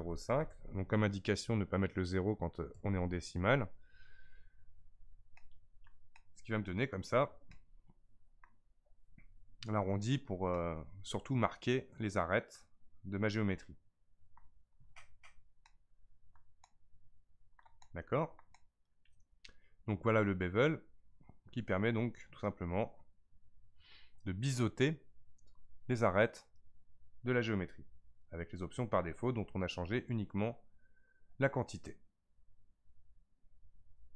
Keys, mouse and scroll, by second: 0.1 KP_0, 5.0 scroll down 3, 5.4-10.6 shift+middle drag, 10.8-13.6 middle drag, 15.6-21.6 middle drag, 22.8-25.8 scroll up 1, 28.2-31.2 scroll up 1.